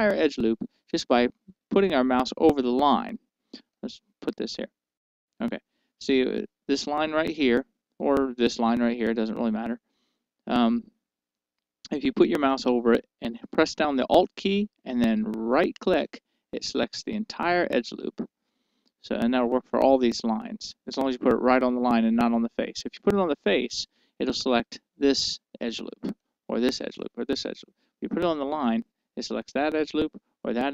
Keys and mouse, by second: 5.3-6.7 right drag, 16.5-18.3 right drag, 24.7-26.9 right drag, 27.3-30.7 right drag.